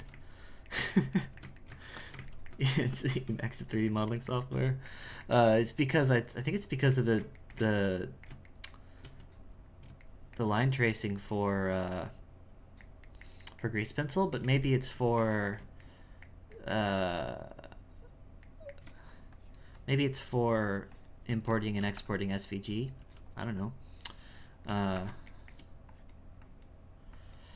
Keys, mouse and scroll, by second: 19.3-21.3 drag, 21.8 f, 23.6-24.6 drag, 25.4 shift+middle click, 25.9-27.5 drag.